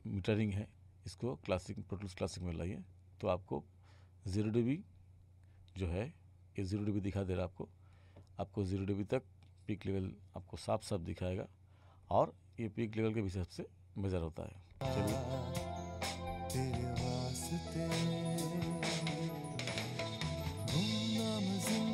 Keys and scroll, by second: 14.8 space.